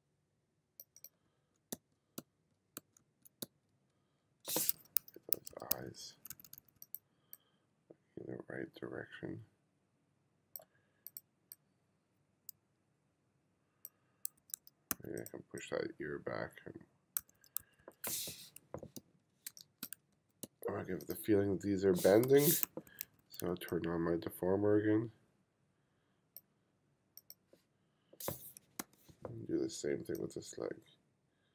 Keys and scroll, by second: 1.3 f, 1.8 g, 2.8 f, 3.5 g, 5.4 1, 5.8 2, 14.5 1, 14.9 2, 17.2-20.5 typing, 22.3 m, 22.7 2, 28.9 m, 29.4 m.